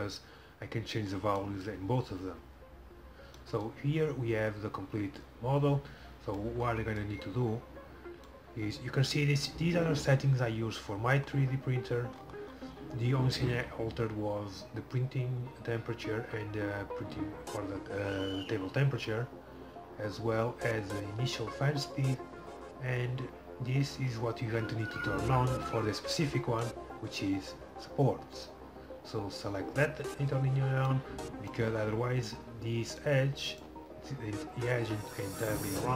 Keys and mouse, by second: 1.6-27.1 drag, 27.1-31.1 middle drag, 31.1-35.9 drag.